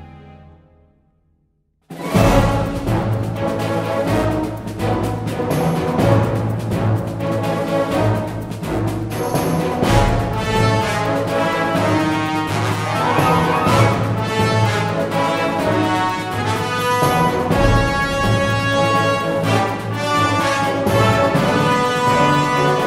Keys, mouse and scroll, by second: 2.9 f, 7.0 g, 7.9 f, 10.9 click, 11.4 f, 12.6 KP_1, 19.3 f, 21.9 f.